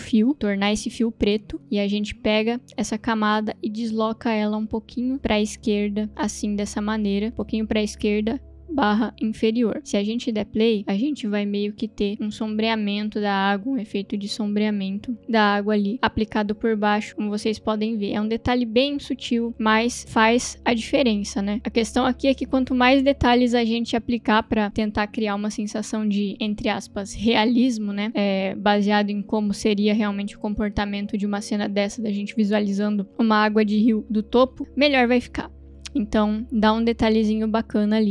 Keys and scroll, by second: 0.3 1, 10.4 space.